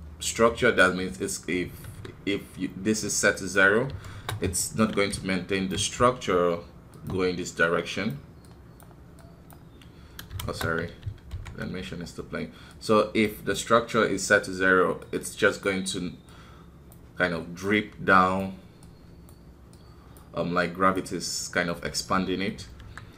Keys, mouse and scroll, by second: 1.7 scroll down 1, 1.8 KP_1, 2.9-4.6 drag, 4.6 shift+middle click, 5.1 d, 5.3 click, 5.7 d, 7.7-10.4 drag, 10.4 shift+space, 11.3 shift+Left, 12.7-21.6 drag, 21.6-22.8 middle drag, 22.8 KP_1.